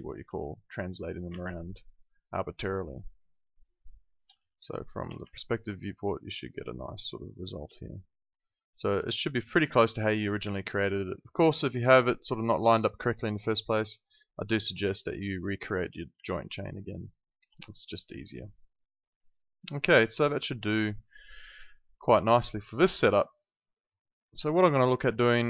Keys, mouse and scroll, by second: 0.2 w, 0.6 click, 1.3 ctrl+z, 2.0 alt+right click, 2.4 alt+middle click, 2.7 alt+right click, 3.4 alt+middle click, 3.7 alt+right click, 4.4 space, 4.5 click, 5.3 alt+click, 6.6 alt+middle click, 7.0 alt+right click, 7.2 alt+click, 9.7 alt+middle click, 10.0 alt+click, 14.8 space, 15.0 click, 16.2 alt+middle click, 16.6 alt+right click, 18.3 alt+middle click, 22.2 space, 22.3 click, 23.1 alt+click, 23.4 alt+right click, 23.7 alt+middle click, 23.9 alt+right click, 24.2 alt+click, 24.5 alt+middle click, 24.7 alt+right click.